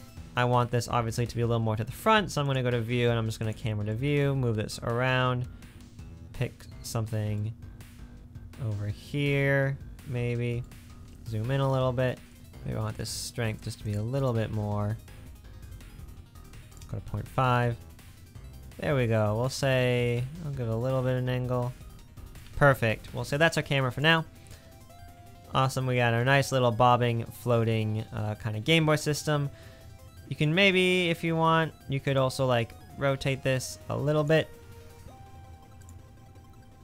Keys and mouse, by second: 0.9 space, 2.5 click, 3.4 click, 6.9 space, 13.9 click, 30.4 click, 32.0 space, 32.2 click.